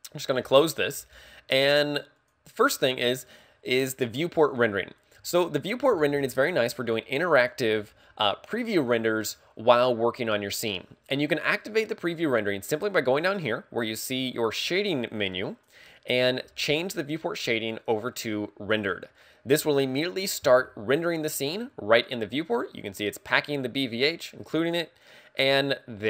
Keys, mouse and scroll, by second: 2.3 click, 21.2 click, 25.4 middle click.